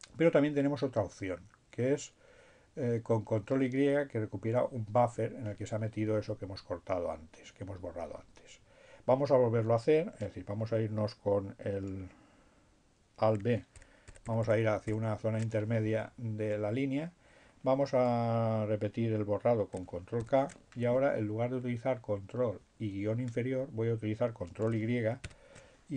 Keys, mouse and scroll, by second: 13.9 alt+b, 18.8 ctrl+k, 23.3 ctrl+y.